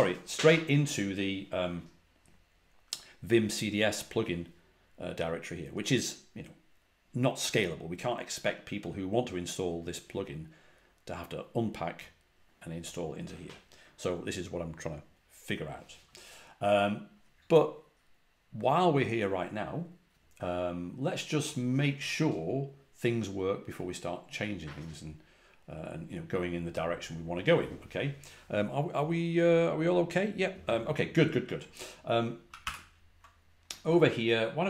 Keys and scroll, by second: 32.4 ctrl+a, 32.5 ctrl+h.